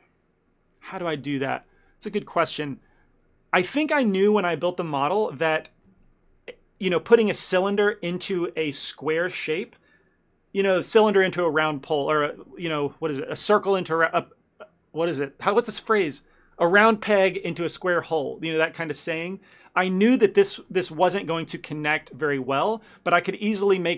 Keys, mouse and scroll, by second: 20.6 ctrl+middle click.